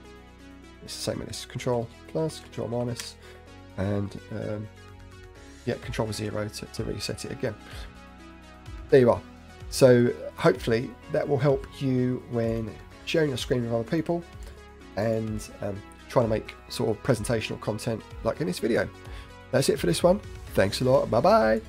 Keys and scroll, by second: 1.8 ctrl+=, 1.9 ctrl+=, 2.1 ctrl+=, 2.4 ctrl+-, 2.6 ctrl+-, 2.8 ctrl+-, 4.3 ctrl+-, 4.4 ctrl+-, 5.1 ctrl+0.